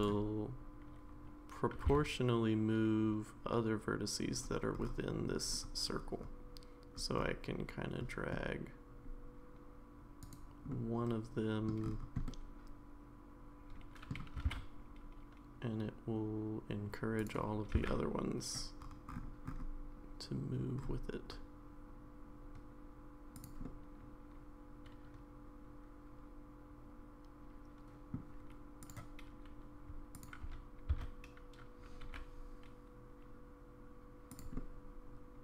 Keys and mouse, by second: 1.7 g, 10.7 middle click, 12.2-14.1 middle drag, 14.3 g, 17.7 g, 23.6-28.1 middle drag, 30.1 shift+click, 30.9 s, 34.5-35.4 middle drag.